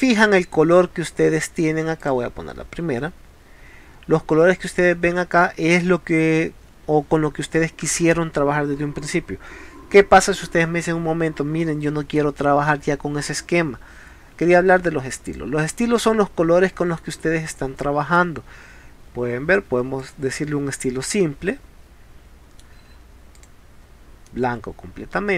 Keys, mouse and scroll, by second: 2.1 click, 4.8 middle click, 11.7 middle click, 15.3 click, 16.3 middle click, 17.6 middle click, 20.0 click, 21.2-22.5 middle drag, 23.4 click, 24.3 middle click.